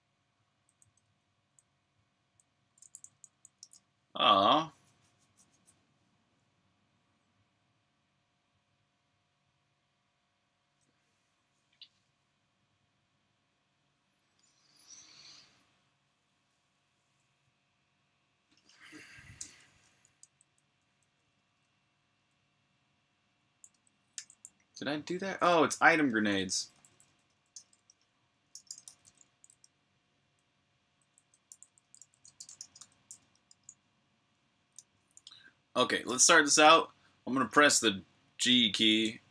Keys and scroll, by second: 0.0-2.1 typing, 3.6 super+q, 20.2-22.0 typing, 23.9 super+j, 25.2-25.6 typing, 28.5-30.4 typing, 33.3 super+r, 33.6-34.5 typing, 34.5 super+h.